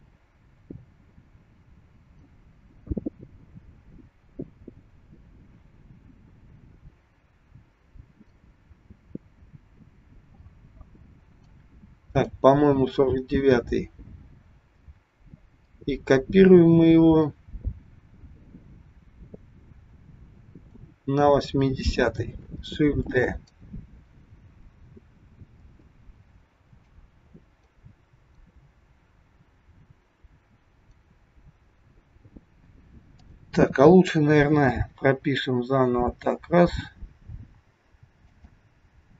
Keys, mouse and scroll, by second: 12.1 click, 15.7 click, 23.1 shift+d, 26.9 click, 31.6-32.1 scroll up 2, 32.1-33.1 scroll up 1, 33.1 click, 35.0 g.